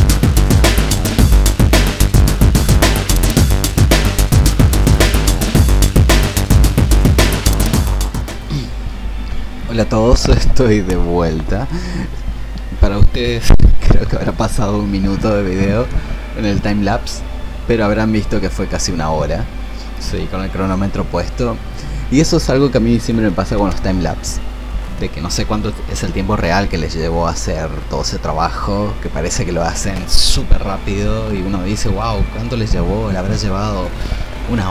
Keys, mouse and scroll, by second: 0.3 click, 1.0 shift+click, 1.1 alt+click, 1.4 shift+click, 1.5 click, 1.8 click, 1.9 click, 2.1 click, 2.4 shift+click, 2.8 ctrl+z, 2.9 click, 3.3 ctrl+z, 3.3 click, 3.5 ctrl+z, 3.5 click, 3.5 click, 3.7 alt+click, 3.8 click, 4.4 shift+click, 5.0 ctrl+z, 5.4 click, 5.7 shift+click, 5.8 click, 6.0 shift+click, 6.0 click, 6.5 click, 6.7 shift+click, 6.7 click, 7.1 shift+click, 7.8-34.7 drag.